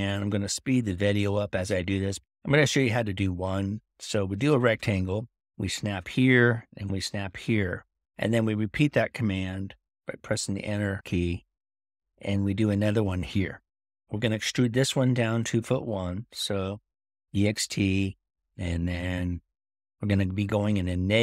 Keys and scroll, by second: 5.3-6.0 typing, 17.0-17.7 typing.